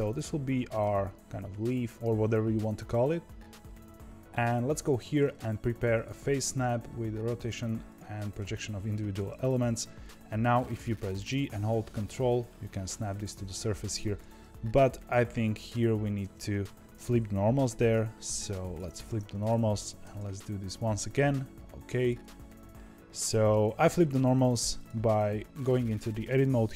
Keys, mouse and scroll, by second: 4.7-7.8 drag, 15.3 click, 16.1 Tab, 17.6 alt+n, 19.0 Tab, 19.3 click, 20.0 g, 22.7-24.7 shift+middle drag, 24.7 click, 25.6 Tab.